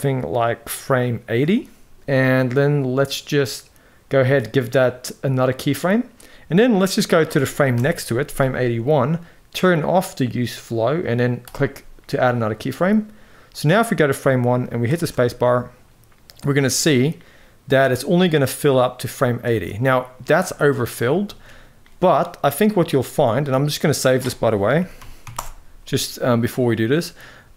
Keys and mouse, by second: 5.0 click, 7.4 Right, 9.3 click, 11.1 click, 13.2-14.5 drag, 14.6 space, 19.1 space, 19.5-19.8 middle drag, 21.0 ctrl+s.